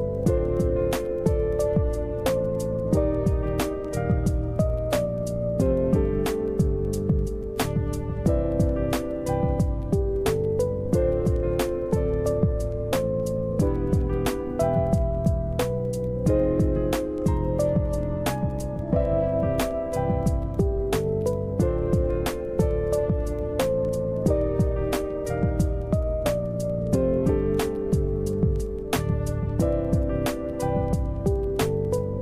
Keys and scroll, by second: 4.2 Delete, 5.5 Delete, 6.2 Delete, 22.5 Delete, 26.5 Delete, 27.8 Delete.